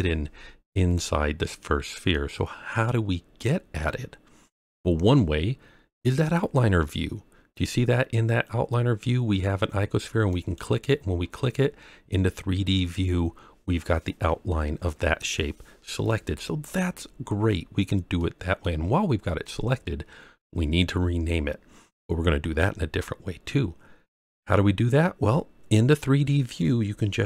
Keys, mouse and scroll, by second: 1.2-1.7 scroll down 2, 2.1-3.8 middle drag, 10.3 click, 11.7-12.7 scroll up 1, 16.6-17.2 scroll down 2, 17.2-18.1 scroll up 2, 18.1-18.6 middle drag, 23.7-24.3 scroll down 3, 24.3-24.9 scroll up 3.